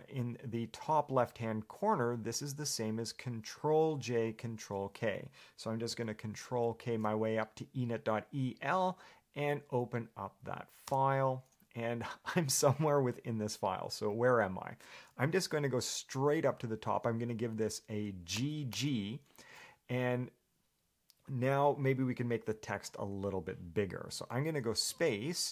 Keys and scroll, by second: 6.7 ctrl+k, 6.9 ctrl+k, 11.2 Return, 18.9 g.